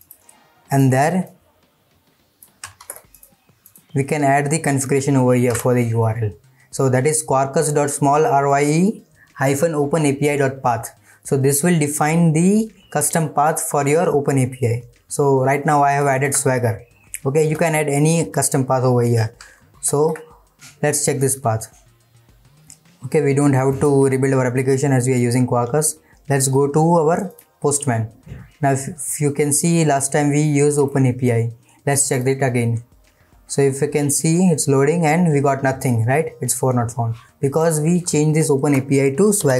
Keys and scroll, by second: 5.5 ctrl+v, 16.1 ctrl+shift+Left, 19.7 ctrl+s.